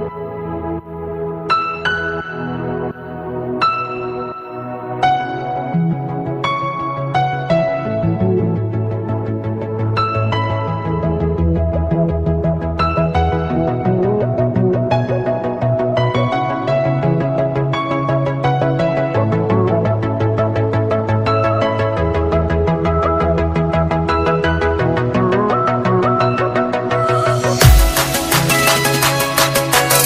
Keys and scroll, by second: 13.7 ctrl+space, 14.9 alt+space, 16.0 ctrl+space, 17.4 alt+space.